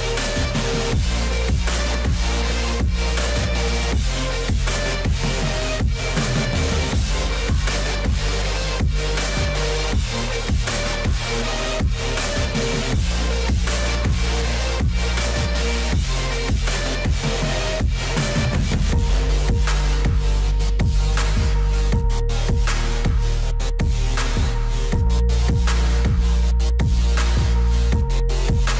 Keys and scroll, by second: 9.9 ctrl+z, 21.6 alt+x.